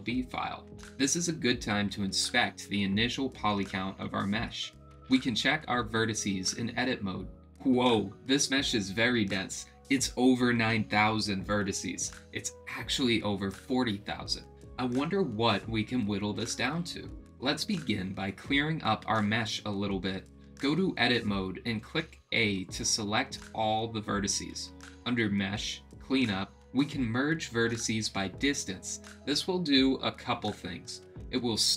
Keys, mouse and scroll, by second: 4.5 middle click, 4.5 right click, 5.8 Tab, 21.0 click, 22.0 a, 24.4-29.8 drag.